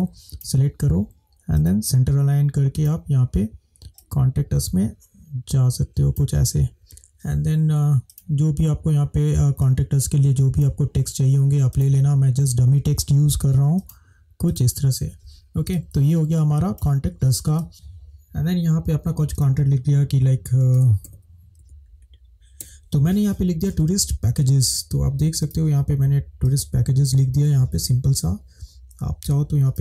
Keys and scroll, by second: 6.8 space, 15.7 space, 17.5 space, 20.8 shift+b, 21.1 shift+e, 22.6 s.